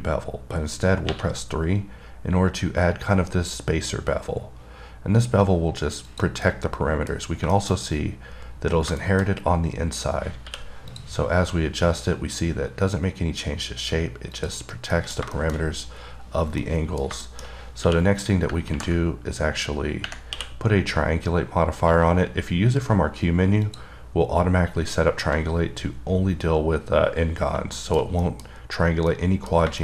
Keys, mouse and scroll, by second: 6.3 click, 6.7 middle click, 7.5 scroll up 1, 7.8 middle click, 8.1 scroll up 1, 9.0 scroll down 3, 9.3 middle click, 9.5 scroll up 3, 11.2 click, 14.9 scroll down 3, 15.2 middle click, 15.6 middle click, 15.9 scroll up 2, 16.6 scroll down 3, 16.9 middle click, 17.5 middle click, 24.1 click, 28.0 middle click, 28.5 middle click, 29.4 middle click.